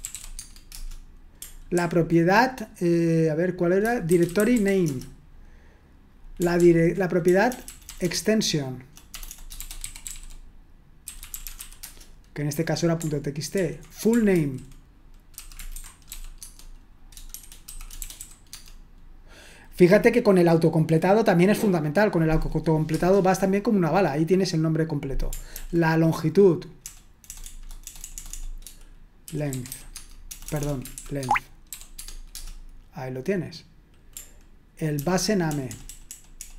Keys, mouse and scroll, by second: 0.0-0.7 typing, 0.7 Return, 1.7 ctrl+p, 4.0-5.1 typing, 6.6 ctrl+p, 7.3-12.1 typing, 13.6 ctrl+p, 14.3 ctrl+w, 15.1-18.7 typing, 16.4 Tab, 25.5 ctrl+p, 26.8-32.2 typing, 32.4 Return, 35.0 ctrl+p, 35.5 BackSpace, 35.7 BackSpace, 35.9 BackSpace, 36.1 BackSpace.